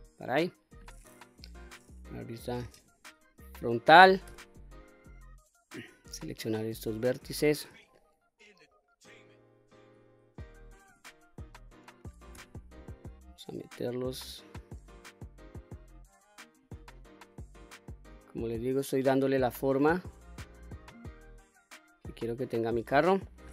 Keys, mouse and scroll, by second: 1.3 KP_1, 2.8 q, 4.3 1, 5.7 click, 7.9-9.4 shift+drag, 10.9 s, 12.4 x, 16.6 click, 17.2 middle click, 17.2 scroll down 1, 18.3 middle click, 19.5-23.2 middle drag.